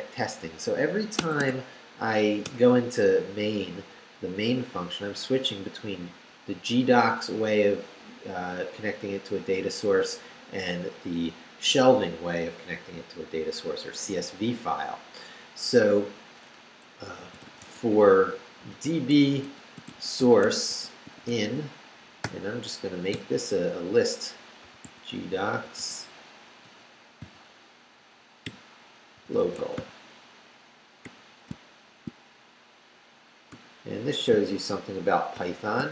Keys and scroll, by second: 0.2 Up, 1.2 Tab, 16.9-23.1 typing, 24.4-27.2 typing, 28.4-31.0 typing, 33.5 ], 34.3 shift+], 35.3 shift+;.